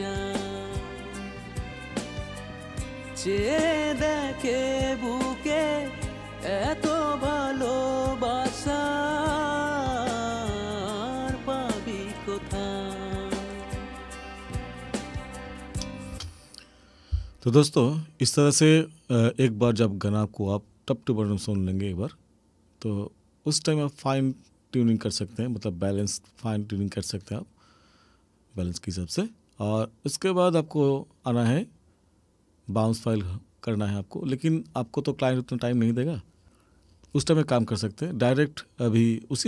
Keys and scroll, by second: 16.1 space.